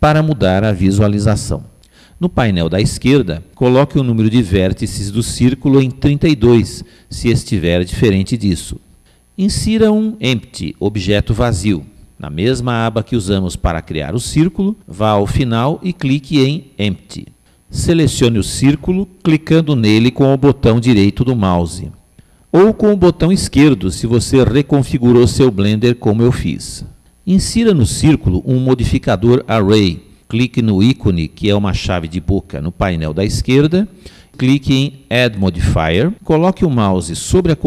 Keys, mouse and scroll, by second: 9.9-15.3 middle drag, 15.3 click, 20.9 click, 30.6 click, 33.8 click, 35.8 click.